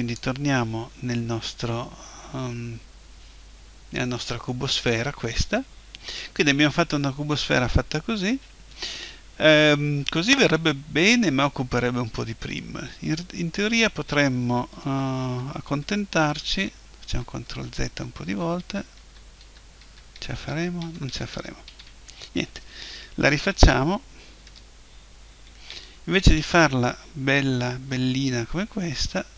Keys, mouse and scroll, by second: 2.3-7.1 middle drag, 14.8 ctrl+z, 15.2 ctrl+z, 15.7 ctrl+z, 16.1 ctrl+z, 16.5 ctrl+z, 17.0 ctrl+z, 17.5 ctrl+z, 17.9 ctrl+z, 18.3 ctrl+z, 18.6 ctrl+z, 19.0 ctrl+z, 19.4 ctrl+z, 19.8 ctrl+z, 20.1 ctrl+z, 20.5 ctrl+z, 20.8 ctrl+z, 21.1 ctrl+z, 21.3 ctrl+z, 21.7 ctrl+z, 24.5 Tab, 25.7 Delete, 28.6 shift+a.